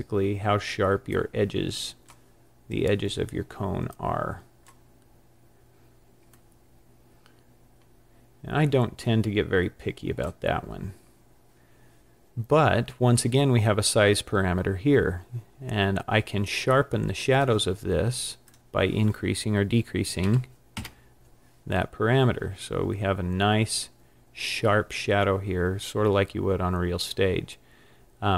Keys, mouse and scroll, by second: 1.4 click, 3.9 click, 4.3 click, 6.4 click, 6.5 click, 18.5 click.